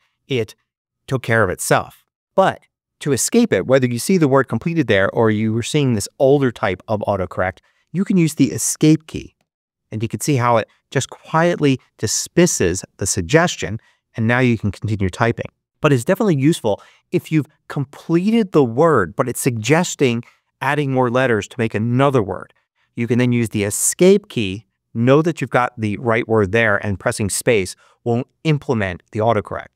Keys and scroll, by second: 1.5 BackSpace, 9.2 ↺.